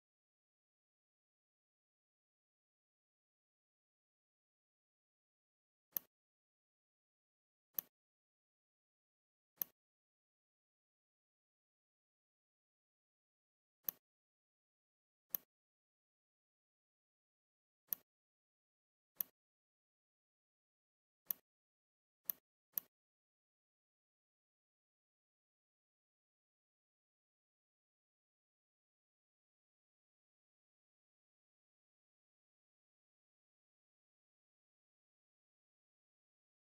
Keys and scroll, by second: 25.4 ctrl+alt+f, 26.6 Left, 26.8 Left, 32.3 Left.